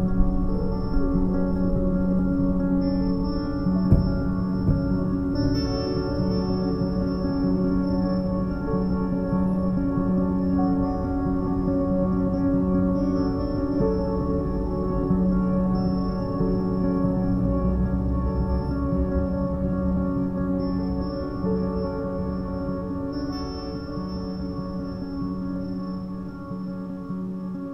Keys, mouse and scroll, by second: 1.5-3.3 middle drag, 3.3 scroll up 1, 3.9-6.2 scroll down 1, 6.2 z, 6.6 b, 8.1 z, 8.7 g, 10.1-10.8 middle drag, 10.8 a, 11.0 a, 11.2-11.6 middle drag, 11.6-11.9 scroll down 1, 11.9-12.6 middle drag, 12.6-13.0 scroll up 2, 13.0-13.9 middle drag, 13.9 z, 14.3 click, 15.3-15.8 scroll down 2, 15.8 KP_7, 16.5 shift+d, 17.0 r, 18.3 scroll up 1, 18.6 g, 20.4 a, 20.6 a, 20.7-21.2 middle drag, 21.2 z, 21.6-23.3 shift+middle drag, 23.3-23.6 scroll up 1, 23.6-25.4 middle drag, 25.4-25.8 scroll down 2, 25.8-26.2 shift+middle drag, 26.2-26.5 scroll down 3, 26.5-27.7 middle drag.